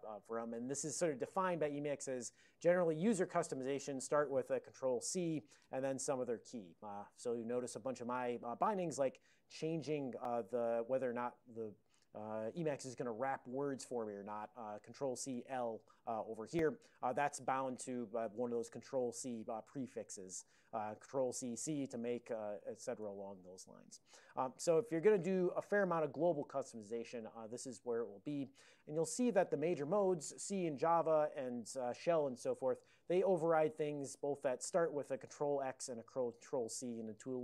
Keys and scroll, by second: 0.0 Right, 0.2 Right, 0.4 Right, 5.1 ctrl+c, 18.4 ctrl+c, 19.2 c, 20.4 ctrl+g, 21.1 ctrl+c, 21.6 c, 22.3 ctrl+g, 22.7 ctrl+c, 23.1 l, 24.3 ctrl+a, 25.0 ctrl+n, 25.5 ctrl+p, 26.9 ctrl+n, 27.3 ctrl+p, 28.1 ctrl+n, 32.2 ctrl+p, 32.4 ctrl+p, 33.4 ctrl+n, 33.7 ctrl+p, 35.6 ctrl+n, 37.3 ctrl+p.